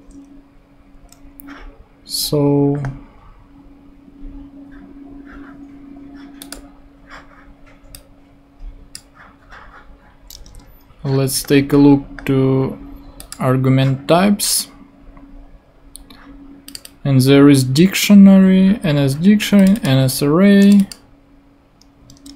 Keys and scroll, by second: 10.4 super+Tab, 22.1 super+Tab.